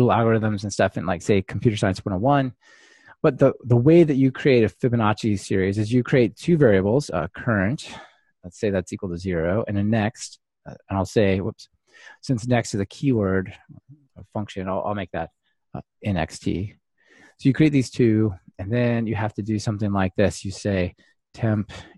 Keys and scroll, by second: 10.8 Delete, 11.6 super+z.